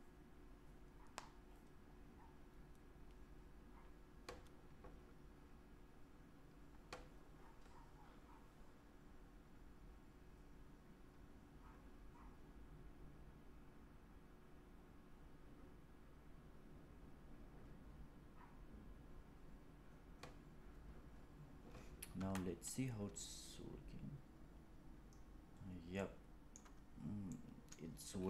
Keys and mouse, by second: 20.9 click, 22.0 space, 25.9-26.4 middle drag, 27.2-27.6 middle drag.